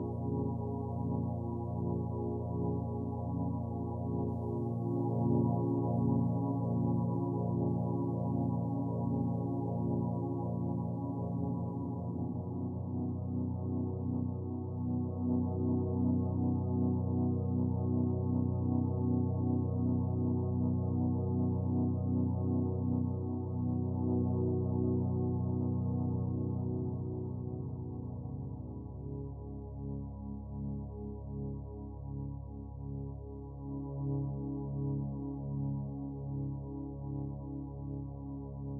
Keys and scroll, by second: 0.6 space, 2.1 space, 5.8 space, 7.1 ], 11.7-12.8 typing, 13.7 ctrl+z, 19.1 ctrl+alt+z, 20.2-20.6 typing, 21.7-22.2 typing, 24.1 ctrl+z, 24.9-25.3 typing, 27.5 space, 33.7 space, 38.3 space.